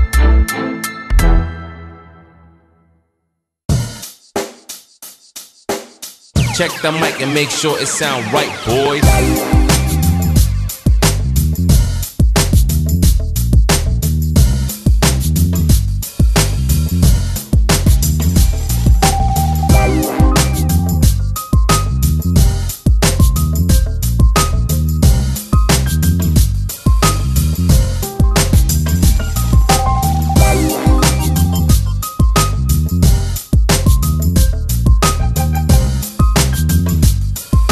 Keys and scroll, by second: 0.7 7, 0.8 0, 1.1 Return, 1.8 Escape, 2.8 Escape, 5.5 w, 8.8 Escape, 9.2 2, 9.9 Escape, 10.1 3, 10.4 w, 11.5 Escape, 12.0 w, 14.8 r, 18.7 Escape, 20.4 shift+Tab, 20.7 Escape, 21.6 l, 22.0 shift+w, 22.5 Escape, 26.7 l, 27.1 shift+w, 28.3 2, 28.4 0, 28.5 Return, 29.2 Escape, 31.0 l, 31.4 shift+w, 31.8 Escape, 32.9 l, 33.3 shift+w, 33.7 Escape, 34.6 Escape, 35.9 l, 36.3 shift+w, 36.7 Escape, 37.6 shift+w.